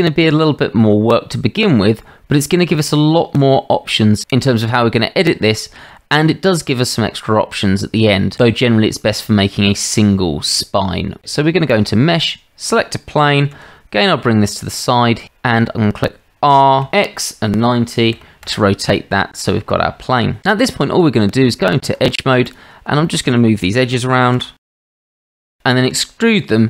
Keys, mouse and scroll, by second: 13.5 g, 15.2-15.5 shift+middle drag, 16.7 r, 20.4 Tab, 20.7 Tab, 22.4 click, 23.0 shift+click, 24.3 g, 25.9 e.